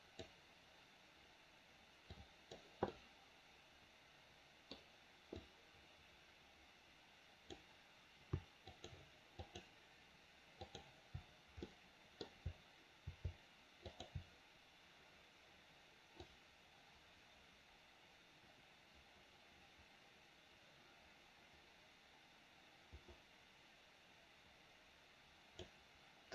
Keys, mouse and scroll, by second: 2.2 click, 2.8-4.7 middle drag, 5.3-7.6 drag, 8.7 shift+click, 9.4 shift+click, 10.6 shift+click, 11.7 middle click, 13.8 shift+click, 16.3-25.7 drag.